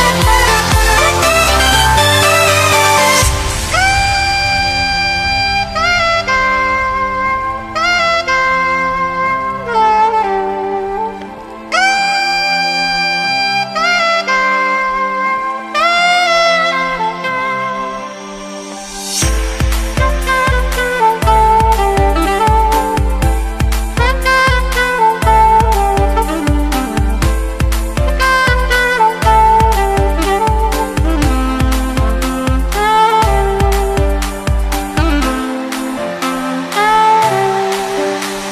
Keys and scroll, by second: 3.5 super+z.